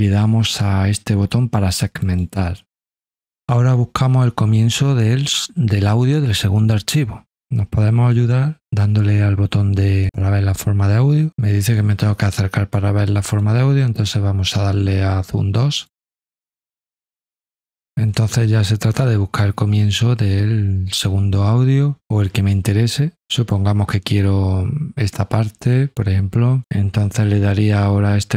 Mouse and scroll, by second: 2.0 click, 13.2 click, 15.7 click, 18.0-23.2 drag, 23.4-26.6 drag.